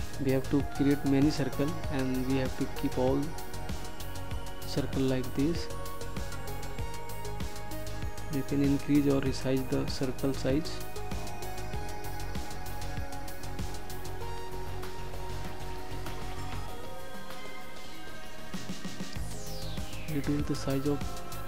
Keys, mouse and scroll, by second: 6.1 ctrl+d, 9.0 click, 15.1 ctrl+d, 20.5 ctrl+shift+click.